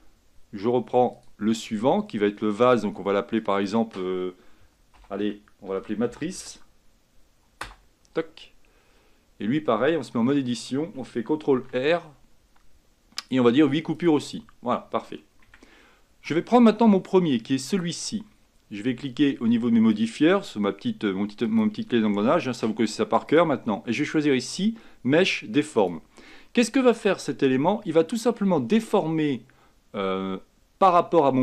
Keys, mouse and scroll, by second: 0.0 Tab, 1.2-10.3 drag, 10.3 Tab, 11.6 ctrl+r, 15.6 Tab, 17.8-22.0 drag, 23.4-31.4 drag.